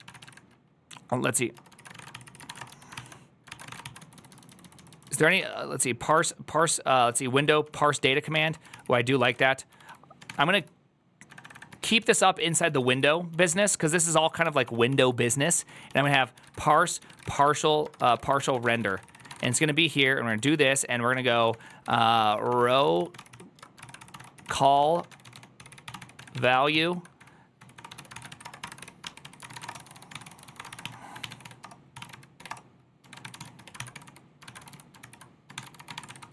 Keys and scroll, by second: 10.2 1, 11.0 3, 12.0-13.3 typing, 27.5-28.3 typing, 30.3 3, 34.3-35.8 typing.